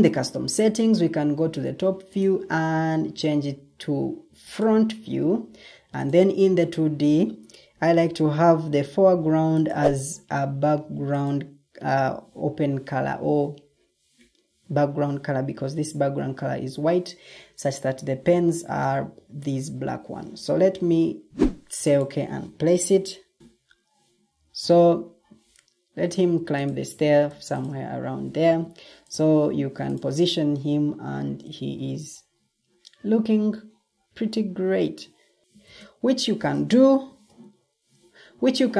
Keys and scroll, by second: 28.3 ctrl+alt+shift+d, 31.1 Escape, 35.4 ctrl+shift+t, 36.2 ctrl+t.